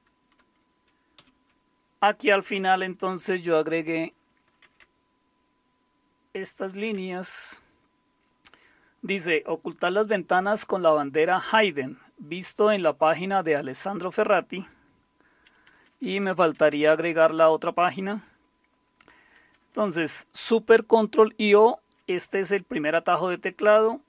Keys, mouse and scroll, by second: 1.2 typing, 4.1-6.9 typing, 15.4-16.5 typing, 19.0-19.8 typing.